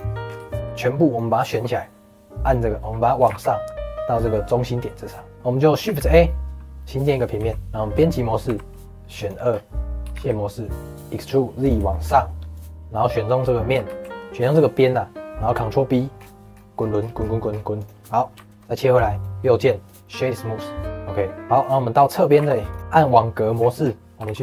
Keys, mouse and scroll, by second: 0.2 scroll down 2, 0.4 shift+middle click, 0.8 click, 1.5 middle click, 2.3 click, 3.1 g, 5.3 middle click, 5.8 shift+a, 7.3 s, 7.6 Tab, 8.1 middle click, 8.4 2, 9.1 click, 9.4-10.0 scroll down 1, 10.0 e, 11.8 shift+middle click, 12.5 click, 13.3 middle click, 13.8 ctrl+b, 18.0 middle click, 18.3 Tab, 18.7 middle click, 19.0-20.1 right drag, 20.1-21.5 middle drag, 21.5 click, 21.9-22.3 scroll down 2, 22.3 g, 22.9 click, 23.5-23.8 scroll up 6, 24.1 g.